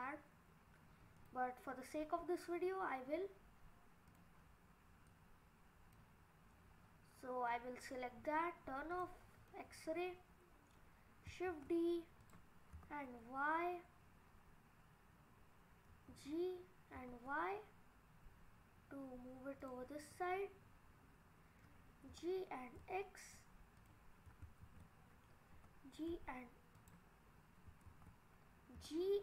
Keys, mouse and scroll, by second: 1.2 click, 4.2 click, 5.1 click, 8.9 click, 9.5 middle click, 11.5 shift+d, 12.8 y, 15.9 g, 20.0 scroll up 2, 20.2 middle click, 21.6 middle click, 21.7 click, 22.1 g, 22.8 x, 24.7 ctrl+z, 25.3 click, 25.5 g, 26.1 z, 27.9 ctrl+z, 28.8 g.